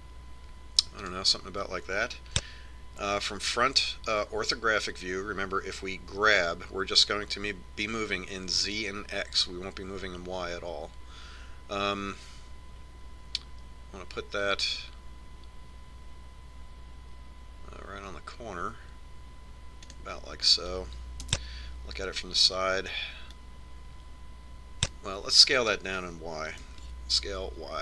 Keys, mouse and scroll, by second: 7.6 g, 22.6 KP_3, 24.7-26.4 drag.